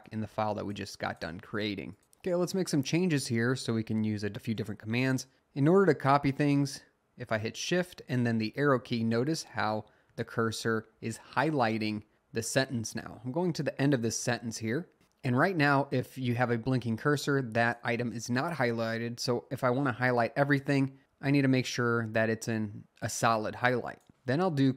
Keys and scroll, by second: 2.9 Down, 3.1-3.7 Down, 3.9 Down, 4.1 Down, 7.5 Right, 8.3 Right, 8.7 Right, 9.6 Right, 10.1 Right, 10.8 Right, 13.6 Left, 14.2 Left, 18.7 Right.